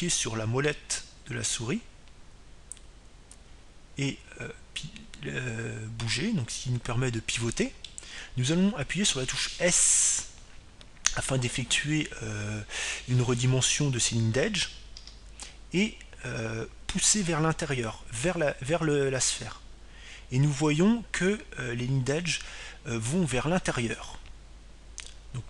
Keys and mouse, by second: 2.3-4.6 middle drag, 16.8 s.